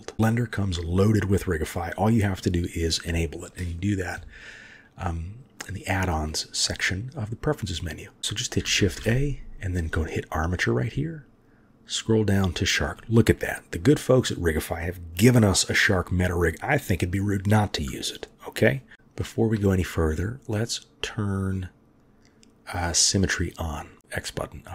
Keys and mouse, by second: 8.8 shift+a, 18.9-19.5 shift+middle drag, 23.0-23.6 drag.